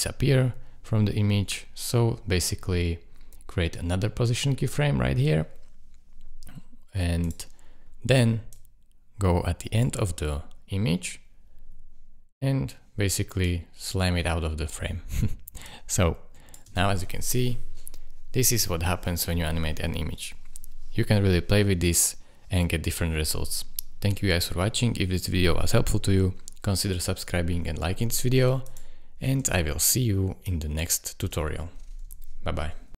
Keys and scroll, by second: 16.6 space, 29.3 space, 31.2 space.